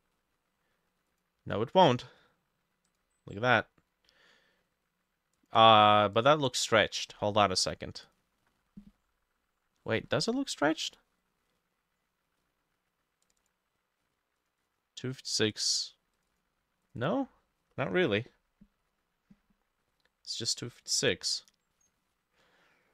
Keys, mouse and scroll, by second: 6.5-8.5 drag, 13.4-19.0 drag.